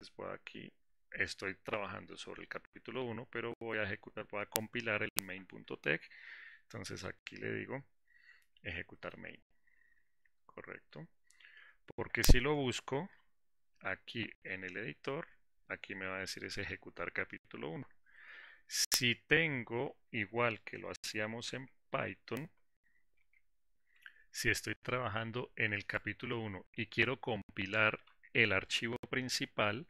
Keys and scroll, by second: 9.4 ctrl+shift+F10, 21.7 alt+4.